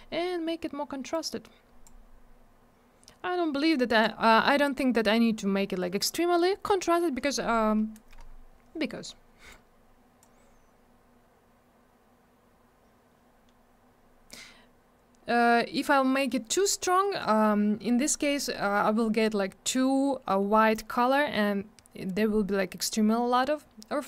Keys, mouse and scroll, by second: 1.1 click, 3.7 click, 9.5 click.